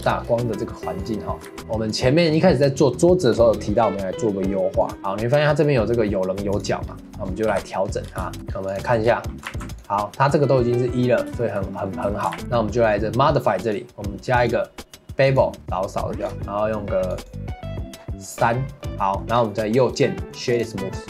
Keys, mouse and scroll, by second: 0.1 shift+middle click, 1.0 click, 1.4 ctrl+s, 1.6 shift+middle click, 1.9 click, 4.9 click, 5.0-6.5 middle drag, 6.5 click, 6.9-7.4 scroll down 1, 7.5 KP_Decimal, 8.0 scroll down 2, 8.2 shift+middle drag, 8.4 scroll up 4, 8.7 click, 9.2 middle drag, 9.5 ctrl+s, 9.9-12.3 middle drag, 12.3 ctrl+s, 12.4 click, 13.6 click, 14.4-16.1 drag, 17.0-18.8 drag, 18.8 middle click, 18.9 ctrl+s, 19.0-19.3 middle drag, 19.3 scroll up 1, 19.6-19.9 middle drag, 19.9 right click.